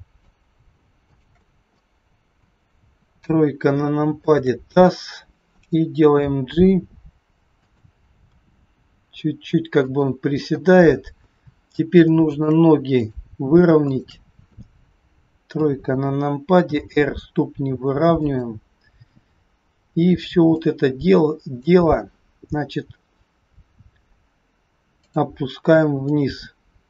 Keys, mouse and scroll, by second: 1.0 shift+click, 1.7 middle click, 2.9 KP_3, 3.6 scroll down 1, 4.0 shift+click, 4.8-5.8 scroll down 2, 6.2 g, 8.3 r, 11.7 scroll up 2, 12.0 shift+middle click, 12.9 click, 13.8 shift+click, 15.4 KP_3, 16.8 r, 19.9-20.4 scroll down 3, 20.4 click, 24.9 click, 25.9 click.